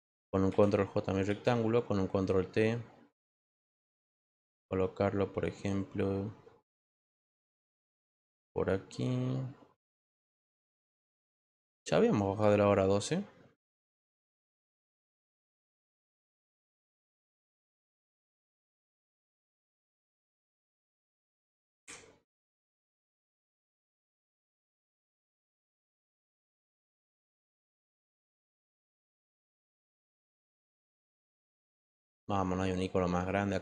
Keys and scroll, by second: 0.5 ctrl+j, 1.2 ctrl+t, 16.1 ctrl+z, 21.7 ctrl+alt+g.